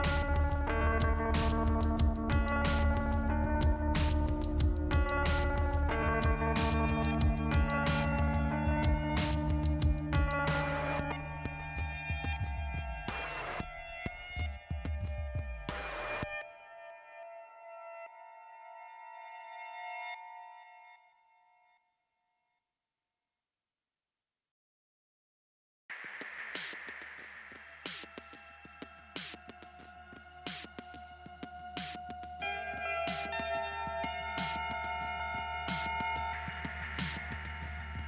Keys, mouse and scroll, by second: 1.3 click, 3.4 click, 3.8 click, 6.4 click, 7.3 click, 9.2-11.6 scroll down 2, 12.4 click, 13.6 click, 13.8 click, 15.1 click, 16.6 click, 17.6 click, 19.9 click, 22.7-25.3 scroll up 1, 25.3 click, 25.6 scroll up 1, 25.8 click, 27.8-28.6 scroll up 1, 28.6-30.4 scroll down 1, 30.4 scroll down 1, 31.1 click, 33.5-33.8 scroll up 2, 37.5 click.